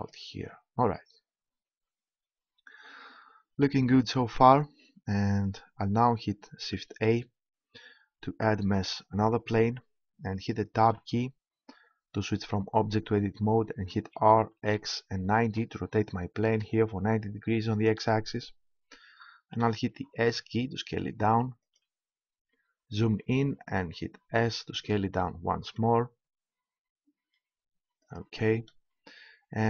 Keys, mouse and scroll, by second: 0.8-4.3 middle drag, 7.0 shift+a, 10.8 Tab, 14.0 r, 19.3 s, 21.7-23.6 drag, 24.3 s, 28.2-29.6 drag.